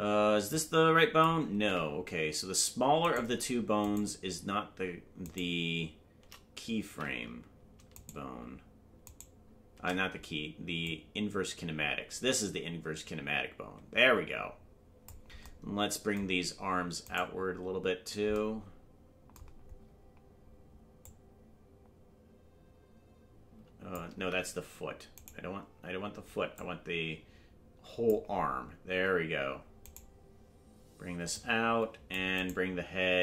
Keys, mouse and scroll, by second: 0.1 scroll up 1, 0.5 click, 2.1 ctrl+z, 3.3-4.1 right drag, 5.6 right click, 7.4 ctrl+z, 8.3 shift+right click, 10.2 shift+right click, 10.8-15.1 drag, 17.3 right click, 19.8-20.5 scroll down 2, 21.0-24.0 drag, 24.7 ctrl+z, 25.5 right click, 26.5-28.1 drag, 31.3 click, 32.7-33.2 right drag.